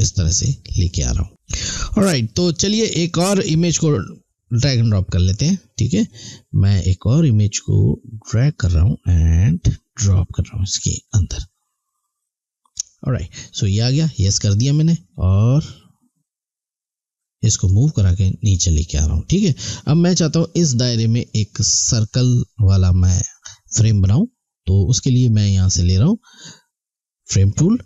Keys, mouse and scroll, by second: 4.5 click, 13.9 click, 17.6 click, 27.2 click.